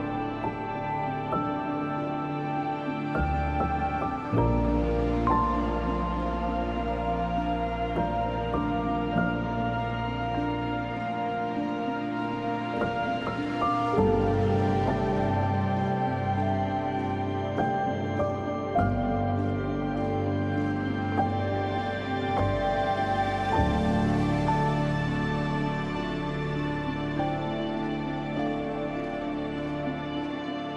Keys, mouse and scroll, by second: 0.2-2.1 typing, 1.0 click, 2.2 click, 3.4 scroll down 1, 3.5-3.9 scroll up 1, 3.9 click, 4.7 scroll down 1, 4.8 scroll up 1, 4.9-5.7 typing, 5.2 click, 7.1 scroll down 1, 7.2 scroll up 1, 8.0 click, 10.8 [, 11.1 click, 12.4 scroll down 2, 12.6 scroll up 1, 13.3-13.6 scroll down 2, 13.9 scroll up 1, 14.7-17.4 typing, 14.9 scroll down 1, 16.2 click, 16.9 scroll up 1, 17.5 click, 21.6 scroll down 1, 22.6 scroll up 1, 23.2 scroll up 1, 23.7 click, 24.3 scroll down 1, 26.4 scroll up 1, 26.7 space, 26.9 click, 27.2 space, 27.9 scroll down 1, 28.7 scroll up 1, 29.0 space, 29.1 click, 29.5 space.